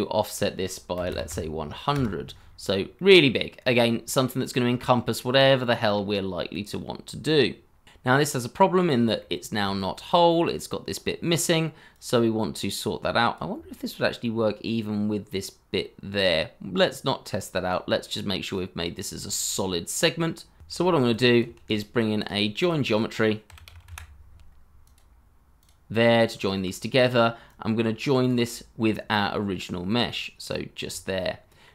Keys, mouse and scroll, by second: 0.9 KP_1, 1.0 KP_0, 1.9 Return, 2.6-2.9 scroll down 1, 2.9 middle click, 3.8 scroll up 1, 4.2 middle click, 7.9 scroll down 1, 8.2 middle click, 10.0 scroll up 1, 13.4 middle click, 16.8-17.4 scroll down 1, 18.1 shift+middle click, 19.8 scroll up 1, 20.6 Escape, 21.5 shift+a, 22.6 double click, 23.4-24.4 typing, 26.0 double click, 31.1 middle click.